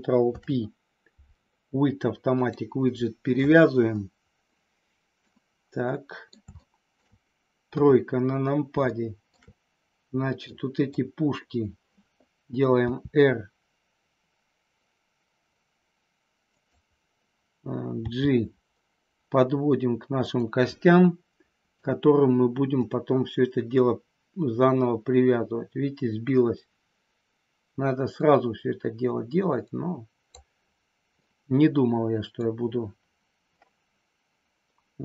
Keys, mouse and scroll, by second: 0.1 ctrl+p, 4.4-6.3 middle drag, 6.5 shift+middle click, 7.7 KP_3, 8.9 shift+middle click, 10.4 click, 12.9 r, 16.4 click, 17.9 g, 20.1 click, 20.9 scroll up 1, 21.0 middle click, 22.8-30.3 drag, 31.1 scroll up 1, 31.3-32.4 middle drag.